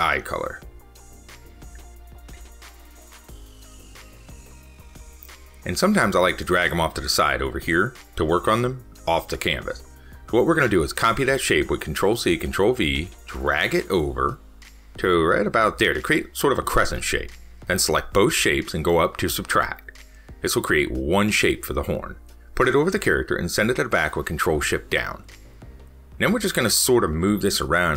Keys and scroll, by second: 24.0 ctrl+shift+Down.